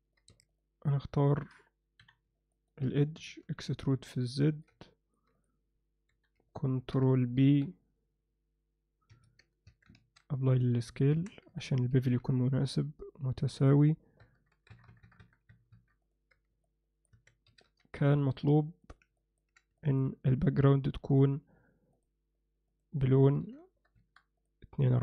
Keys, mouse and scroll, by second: 0.4 2, 0.5 click, 2.0 KP_3, 2.5 ctrl+alt+middle click, 3.2 e, 4.4 ctrl+middle click, 4.8 alt+middle click, 6.1 KP_3, 6.7 ctrl+alt+click, 7.4 ctrl+b, 9.7 Tab, 10.0 ctrl+a, 11.1 Tab, 11.9 ctrl+b, 16.6 alt+middle click, 17.1 Tab, 17.5 s, 19.2 ctrl+middle click, 19.8 middle click, 21.1 click, 21.9 click, 22.8-24.1 drag.